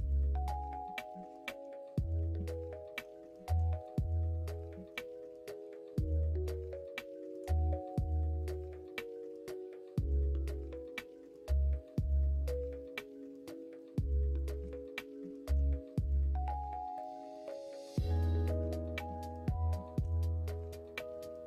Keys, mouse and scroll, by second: 0.7 middle click, 2.1 2, 3.0 middle click, 3.4 shift+middle click, 4.6 shift+middle click, 5.9 alt+click, 7.9 ctrl+click, 9.2 ctrl+click, 10.5 ctrl+click, 11.2 ctrl+click, 11.8 ctrl+click, 12.1 middle click, 12.6 ctrl+e, 13.7 ctrl+e, 14.5 middle click, 15.1 shift+middle click, 16.9 alt+click, 18.2 shift+middle click, 18.8 middle click, 19.3 shift+middle click, 20.8 ctrl+click.